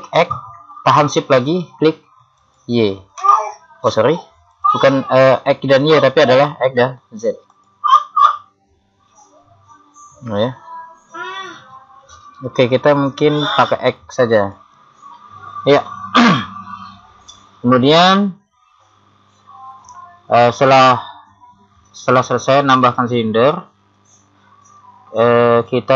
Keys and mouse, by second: 0.2 click, 2.4 click, 4.5 click, 6.5 middle click, 7.5 click, 14.4 click, 16.3-19.9 middle drag.